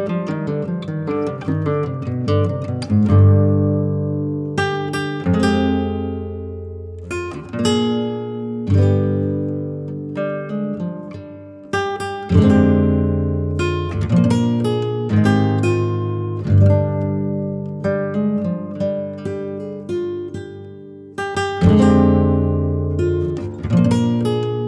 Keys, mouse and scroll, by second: 0.0 scroll up 2, 0.1 middle click, 0.3 scroll down 2, 0.4 shift+middle click, 0.5 scroll up 1, 0.8 middle click, 1.0 click, 1.6-3.7 drag, 3.7 Tab, 4.5 click, 5.1 click, 5.2 middle click, 5.8 f, 6.1 click, 6.7 middle click, 6.8 scroll up 3, 7.1 click, 7.3 f, 7.5 click, 7.9 n, 8.9 click, 9.2 a, 9.5 a, 9.8 click, 10.4 click, 11.1 ctrl+z, 11.6 click, 12.0 f, 12.6 click, 13.5 ctrl+z, 13.6 f, 13.9-15.2 drag, 15.2 ctrl+z, 15.7 click, 16.3 ctrl+z, 16.4 f, 16.6 click, 17.0 ctrl+z, 17.1 f, 17.5 click, 18.0 scroll up 1, 18.1 scroll down 1, 18.3 shift+middle click, 18.5 f, 18.9-21.3 drag, 21.3 scroll down 3, 21.4 middle click, 21.6 ctrl+z, 22.2-23.0 scroll up 5, 23.0 click, 23.8-24.2 scroll down 6, 24.2 ctrl+z, 24.4 middle click, 24.5 scroll down 1, 24.6 middle click.